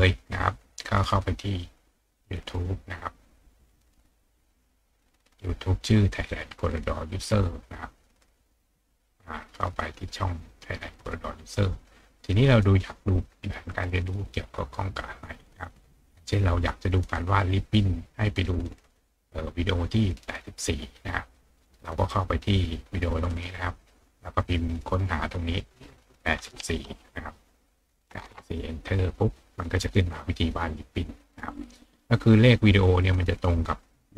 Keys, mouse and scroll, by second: 0.4 click, 2.2 click, 8.4 click, 9.7 click, 10.9 click, 12.2 click, 13.2-13.7 scroll down 2, 15.3 scroll down 2, 18.7 click, 21.2 click, 23.3 click, 24.4 click, 25.2 click, 33.2 click.